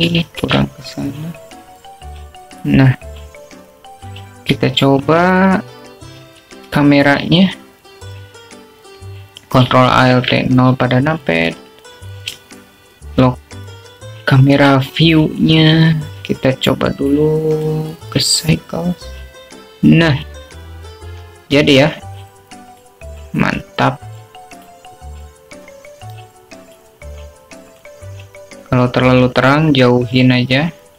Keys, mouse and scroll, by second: 0.0 click, 1.3-2.1 drag, 2.6 shift+t, 8.8 shift+a, 12.4 ctrl+alt+KP_0, 13.6 q, 15.3 shift+middle click, 15.3-16.7 alt+shift+drag, 19.7-20.6 drag, 24.8-25.8 drag, 27.8-28.9 drag.